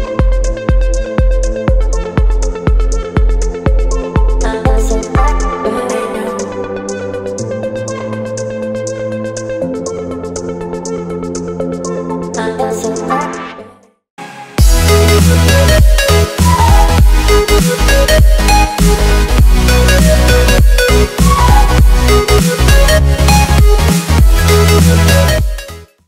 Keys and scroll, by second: 2.5 z, 5.0 v.